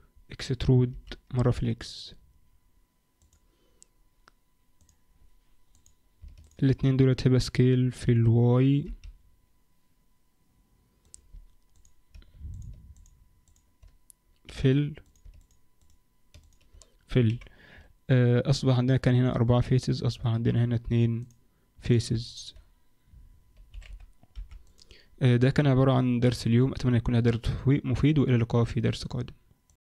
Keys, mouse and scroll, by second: 0.9 e, 4.8 click, 5.7 click, 6.4 shift+click, 8.0 s, 11.7 click, 12.5 shift+click, 12.9 click, 13.4 shift+click, 14.4 f, 15.2 click, 15.4 shift+click, 15.8 shift+click, 16.4 shift+click, 17.2 f, 21.2 click, 21.8 click, 22.2 shift+click, 23.7 s.